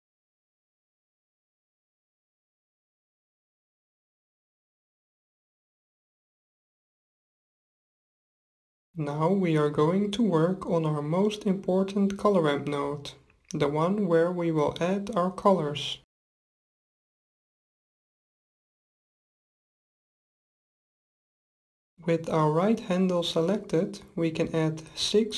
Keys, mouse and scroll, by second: 0.6-2.4 middle drag, 2.7-4.4 middle drag, 7.0-8.8 drag, 8.7-11.3 middle drag, 11.8-13.6 drag, 14.3-16.1 drag, 23.9-25.3 drag.